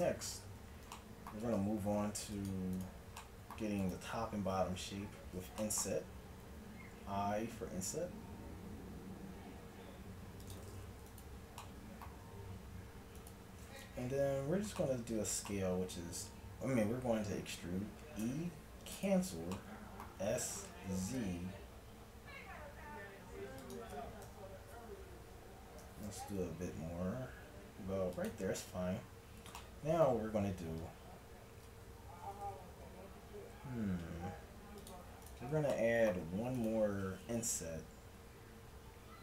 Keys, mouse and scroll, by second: 0.6 Tab, 1.5 ctrl+Tab, 2.8-4.6 drag, 6.4 i, 7.5 middle click, 11.1-15.2 drag, 18.3 e, 20.2 s, 23.6 click, 24.2 KP_1, 25.8 s, 29.2-31.7 middle drag, 31.7 ctrl+Tab, 35.7-39.1 drag, 38.1 i.